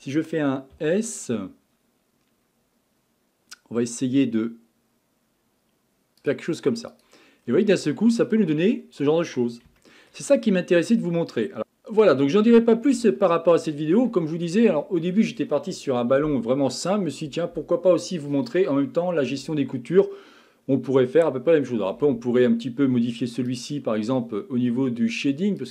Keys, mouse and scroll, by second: 0.7 s, 6.9 click, 7.4-7.9 scroll down 4, 7.9-9.3 middle drag, 9.3-9.8 scroll down 4, 9.8-12.4 shift+middle drag, 12.4-13.1 scroll up 5, 13.1-14.3 shift+middle drag, 14.3-14.8 scroll down 2, 14.8-18.0 shift+middle drag, 23.5 click.